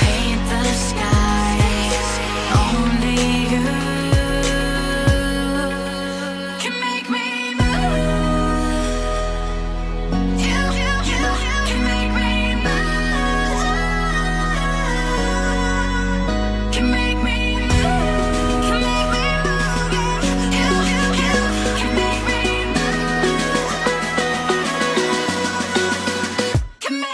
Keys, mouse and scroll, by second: 0.1 Tab, 3.6-3.9 scroll down 4, 3.9 shift+middle click, 4.9 Escape, 8.6 scroll up 2, 9.3-10.0 scroll up 8, 10.0-11.3 scroll up 1, 12.9 middle click, 18.9 Escape, 23.9 middle click, 26.7-27.0 scroll down 2.